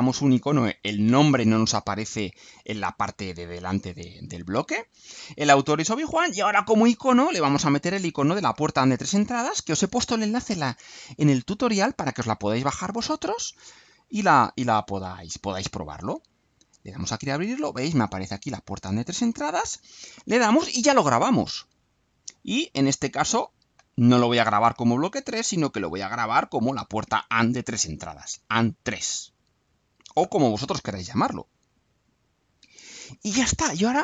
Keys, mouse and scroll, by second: 7.1 click, 10.8 click, 14.4-15.6 alt+drag, 16.5 click, 19.7 click, 23.2 click, 25.9 click, 27.9 alt+click, 29.5 click, 31.5 click.